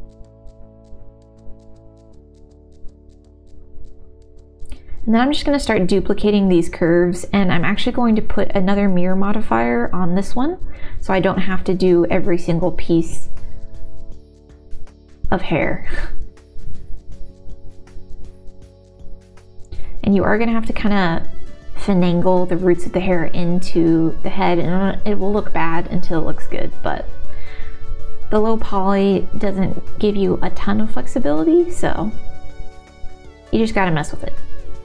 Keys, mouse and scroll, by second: 0.2 middle click, 0.8 click, 1.2 g, 1.6 middle click, 1.9 click, 2.4 g, 2.5 Tab, 2.9 shift+d, 3.0 z, 3.2 x, 4.4 middle click, 5.6 shift+d, 6.0 y, 8.6 g, 8.6 z, 8.6 middle click, 10.1-11.8 drag, 11.9 Tab, 12.9 Tab, 12.9 a, 13.9 g, 13.9 x, 14.3 click, 14.6 Tab, 15.0 g, 15.1 x, 15.9 click, 16.0 middle click, 17.4 Tab, 17.6 middle click, 18.0 shift+middle click, 18.4 click, 18.6 middle click, 19.3 g, 20.3 click, 22.0 g, 22.0 z, 22.5 click, 23.1 middle click, 24.3 g, 24.4 middle click, 24.6 middle click, 25.1 shift+middle click, 26.0 g, 26.3 z, 27.0 click, 27.9 alt+s, 28.6 click, 29.8 click, 30.6 click, 31.4 click, 34.1 middle click, 34.3 Tab.